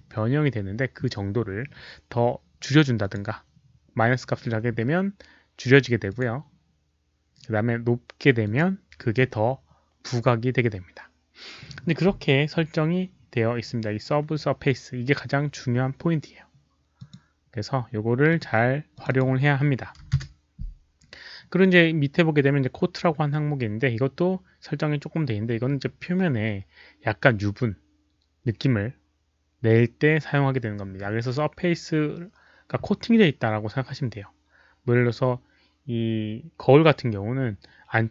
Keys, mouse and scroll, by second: 2.9 click, 6.0 click, 8.4 click, 13.8 click, 16.9 click, 18.2 click, 19.0 click, 19.9 KP_0, 20.1 Return, 25.3 Return, 25.3 click, 25.3 KP_0, 27.7 Return, 27.7 click, 27.7 KP_0, 32.1 middle click.